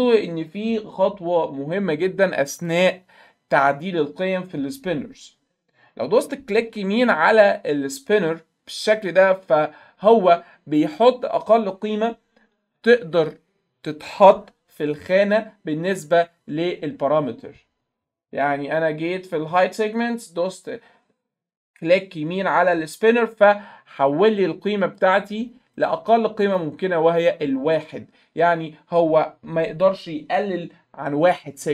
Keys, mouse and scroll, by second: 2.6 click, 8.9 right click, 15.2 click, 24.3-25.0 drag, 25.8 right click, 26.5 click.